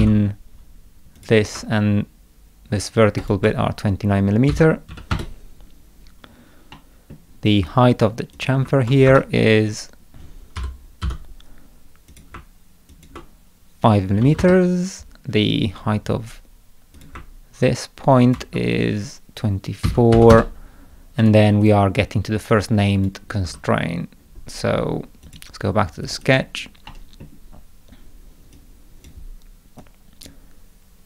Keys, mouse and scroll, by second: 0.0-0.5 typing, 1.2 click, 3.2 ctrl+click, 6.7 middle click, 8.4 click, 9.1 Escape, 10.6 k, 11.0 d, 12.1 click, 12.9 ctrl+click, 17.0 click, 18.2 ctrl+click, 21.2 right click, 21.6 click, 22.5 click, 23.5 Escape, 25.3 click, 26.1 click, 26.2 click, 26.9 middle click, 27.6 scroll down 1, 28.6-29.1 drag, 29.8-30.3 drag.